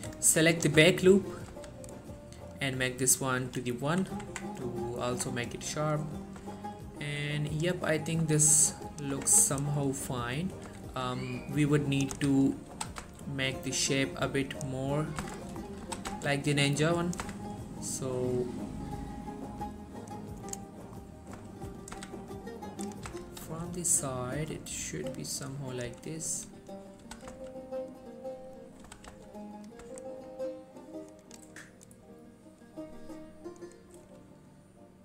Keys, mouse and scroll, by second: 0.4 alt+shift+click, 1.0-1.6 middle click, 1.6 z, 3.0-3.9 click, 4.0 1, 4.4 Tab, 4.9 scroll down 1, 5.2 Tab, 5.4-6.4 scroll up 1, 6.4-7.1 scroll down 2, 6.5 Tab, 7.7 click, 8.0-8.3 scroll up 1, 9.0 click, 9.2 Tab, 9.6 shift+middle click, 9.9-10.6 scroll up 1, 10.8 z, 11.7-12.3 click, 12.2 z, 12.8 g, 13.1 z, 14.7 right click, 15.2 scroll down 1, 15.3 z, 15.5 shift+middle click, 15.9 g, 16.2 z, 17.2 click, 17.3 z, 18.4-20.9 drag, 20.5 right click, 21.1 scroll down 1, 21.2 middle click, 21.6 3, 22.0-22.7 scroll up 1, 22.7 click, 23.2 z, 23.6 g, 25.8 click, 26.0 1, 27.1 g, 27.4 x, 28.7 right click, 28.9 g, 29.2 x, 29.7 click, 29.9 Tab, 30.3-30.9 scroll down 1, 31.3 click, 32.7 scroll up 1.